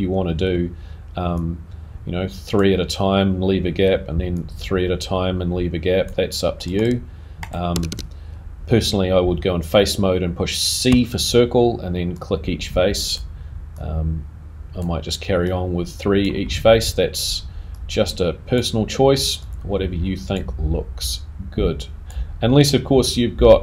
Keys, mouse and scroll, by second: 0.4 a, 0.4 c.